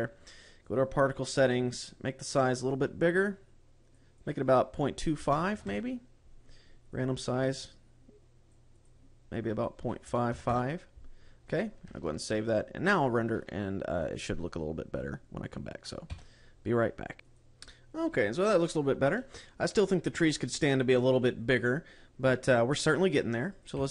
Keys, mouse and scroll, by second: 1.0 click, 4.0 click, 4.4 click, 7.2 click, 9.1 click, 12.3 ctrl+s.